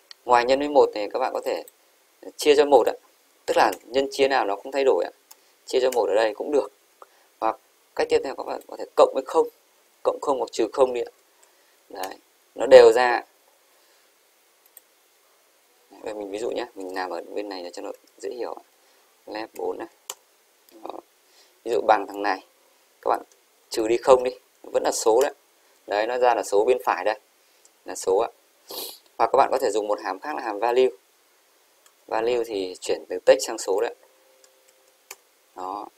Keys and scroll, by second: 9.8 shift+Right, 11.2 shift+=, 11.6 0, 12.1 Return, 24.2 shift+-, 25.3 Return, 25.8 Up, 34.8 shift+0, 35.2 Return, 35.8 Up.